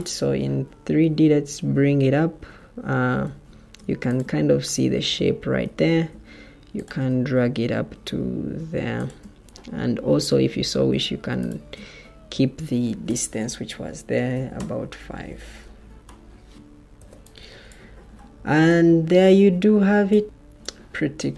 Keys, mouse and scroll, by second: 1.8 Escape, 3.2 Escape, 5.8 ctrl+d, 10.7 ctrl+d, 12.7 shift+Tab, 14.2 5, 14.4 Return, 15.2 Escape, 16.9 o.